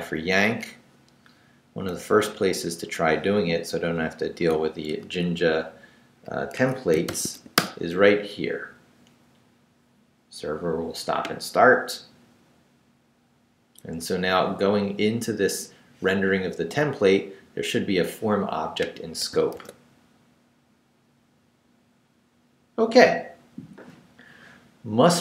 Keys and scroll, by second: 0.3 Down, 2.1 Down, 3.9 p, 4.9 i, 5.0 Tab, 6.5 Escape, 7.1 shift+;, 7.3 shift+w, 7.6 Return, 19.5 super+r.